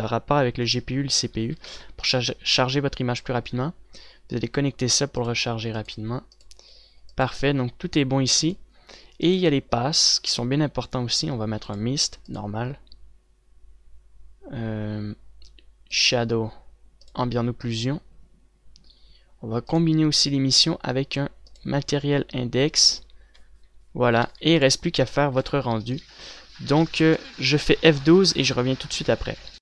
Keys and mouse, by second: 1.5 a, 1.7 a, 2.0 ctrl+s, 11.9-23.3 drag, 23.3-23.9 a, 24.2 ctrl+s, 25.2 ctrl+s.